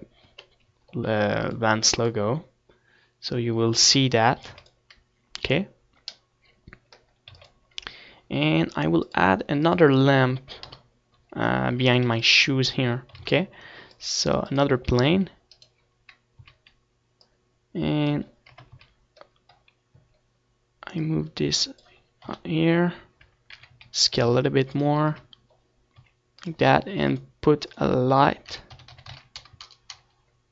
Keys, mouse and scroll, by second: 2.1 Tab, 3.2-4.6 right drag, 4.0-5.0 drag, 6.4 ctrl+s, 8.2-10.4 middle drag, 9.3 ctrl+s, 11.1-12.7 drag, 12.7 KP_7, 13.5 scroll down 1, 13.7 a, 14.1 ctrl+s, 15.2 shift+a, 16.6 click, 16.9 s, 17.7-19.4 right drag, 18.4 z, 18.5-19.6 middle drag, 19.2-20.8 drag, 20.4 KP_0, 20.6 z, 21.1 middle click, 22.9-24.5 drag, 24.1 KP_1, 25.4 r, 26.1-30.5 drag, 26.2 s, 26.9 KP_0, 27.9 s.